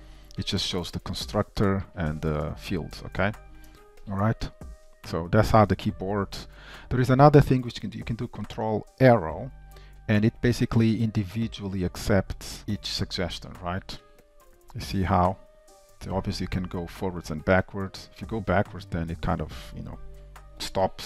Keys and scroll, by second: 2.5 alt+], 3.2 alt+[, 3.7 alt+], 8.6 super+Right.